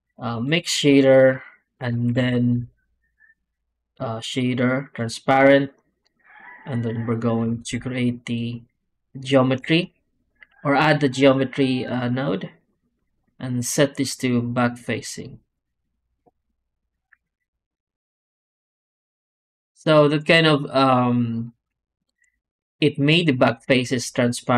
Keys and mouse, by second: 1.0 click, 2.0 shift+a, 5.5 drag, 7.4 shift+a, 12.4 click, 14.4-15.4 drag.